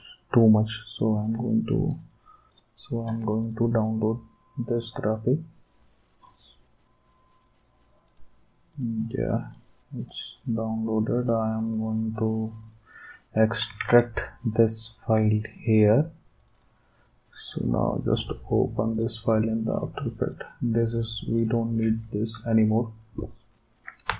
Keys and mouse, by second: 0.9 click, 2.5 click, 8.1 click, 8.7 click, 10.1 click, 11.3 click, 12.6 click, 13.8 alt+Tab, 16.4-17.9 drag, 18.9 click, 24.0 space.